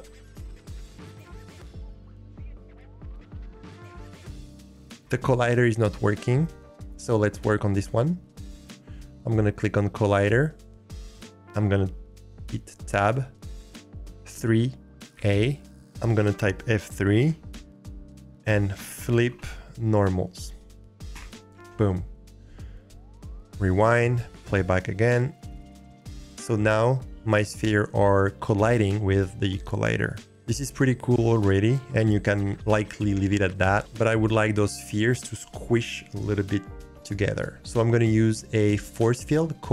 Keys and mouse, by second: 0.2 click, 12.9 Tab, 14.3 3, 15.1 a, 17.0 F3, 21.7 Tab, 24.4 click.